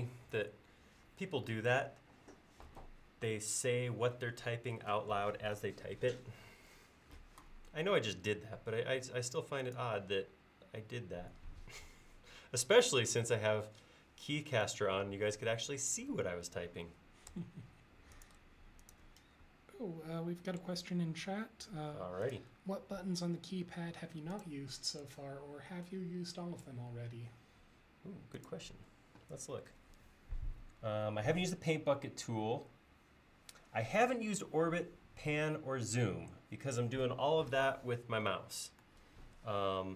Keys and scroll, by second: 23.8 l.